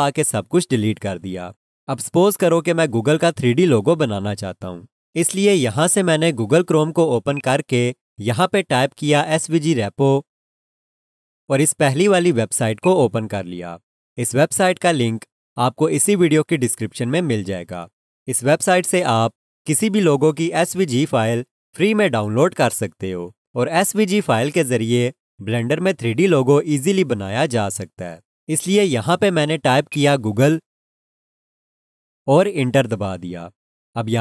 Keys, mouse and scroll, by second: 7.3 click, 12.8 click, 29.9 click, 30.8-32.3 typing.